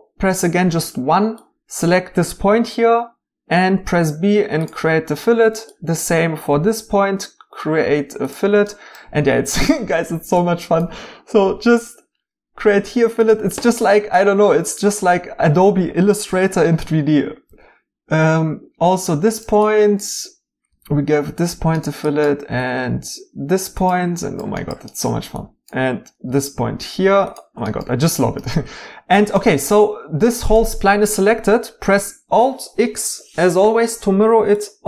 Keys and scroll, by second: 0.5 1, 2.5 b, 6.5 b, 11.4 b, 17.5 b, 20.7 b, 22.5 b, 26.2 b, 29.7 2.